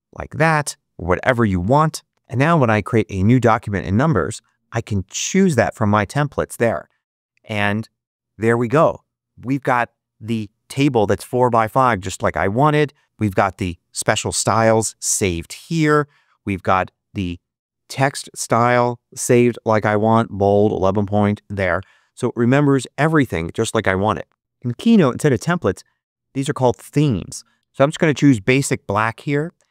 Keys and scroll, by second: 0.0 Return.